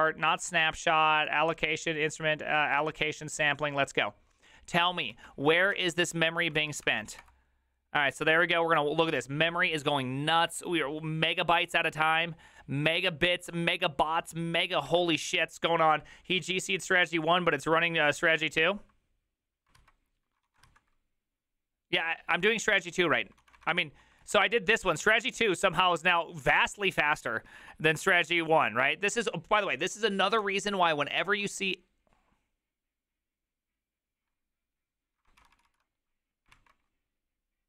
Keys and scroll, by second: 5.6 alt+{, 5.6 ctrl+a, 5.8 4, 6.0 Up, 6.6 ctrl+c, 6.7 ctrl+c, 6.8 Up, 7.2 Return, 20.5 alt+{, 20.5 ctrl+a, 20.6 3, 23.4 ctrl+a, 23.5 [, 23.7 ctrl+u, 24.2 ctrl+u, 35.5 ctrl+c, 35.6 ctrl+c, 36.5 alt+[.